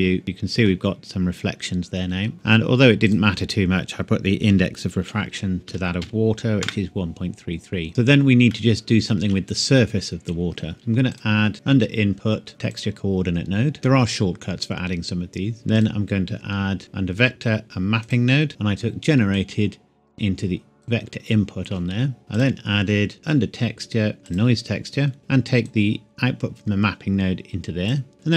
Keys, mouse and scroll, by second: 0.2 middle click, 3.1 click, 4.5 KP_1, 5.0 KP_Decimal, 5.7 KP_3, 6.6 KP_Enter, 7.9-8.5 scroll down 1, 8.8 shift+middle click, 9.2 shift+scroll down 1, 10.8 Delete, 11.1 click, 12.7 click, 13.8-14.2 shift+scroll up 1, 15.7 click, 18.0 click, 18.5 middle click, 19.4 click, 22.3 click, 24.2 click.